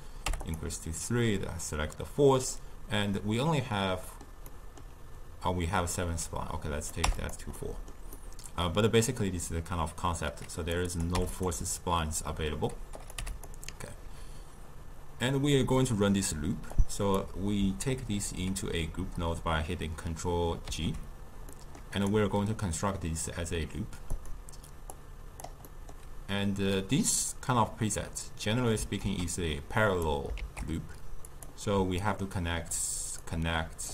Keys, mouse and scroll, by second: 3.4-6.8 middle drag, 6.8 click, 7.6-10.6 middle drag, 10.6 click, 10.9 click, 13.0 click, 16.7-19.9 drag, 20.7 ctrl+g, 21.5-22.0 middle drag, 22.0 click, 24.1-25.7 drag, 25.7-28.8 middle drag, 29.0 shift+d, 30.4 shift+d, 32.0-33.9 alt+right drag.